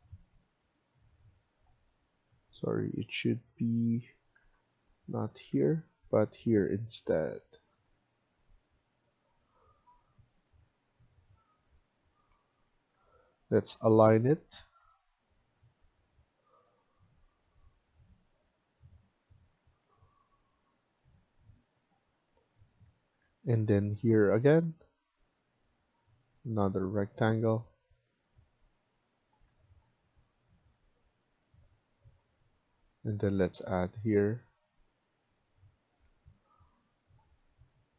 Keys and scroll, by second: 2.1 Escape, 2.4 Escape, 4.3 Tab, 5.4 Delete, 12.2 Escape, 12.5 Escape, 12.8 Escape, 14.2-14.6 typing, 19.4 Escape, 19.8 Escape, 22.9 Escape, 23.1 Escape, 23.4 Escape, 29.3 Escape, 35.9 Escape.